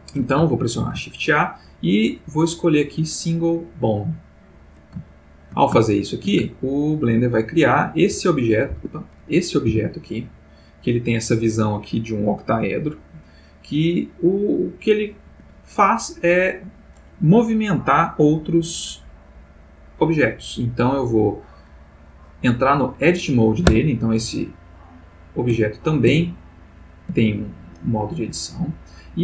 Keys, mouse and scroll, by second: 0.8 shift+a, 3.9 click, 5.1-5.7 ctrl+middle drag, 5.8-6.4 ctrl+shift+middle drag, 6.6-7.3 ctrl+shift+middle drag, 7.5 ctrl+click, 8.0 ctrl+g, 8.7 Escape, 9.1 click, 9.7 g, 15.3 Escape, 19.3 click, 23.6 Tab, 24.7 click, 25.5 Tab, 26.4 click, 27.1 Tab.